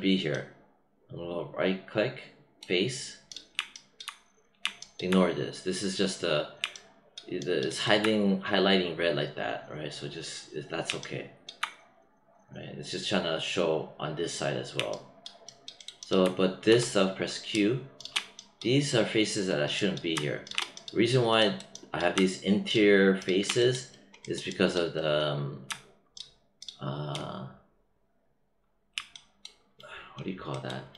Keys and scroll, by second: 16.6 q.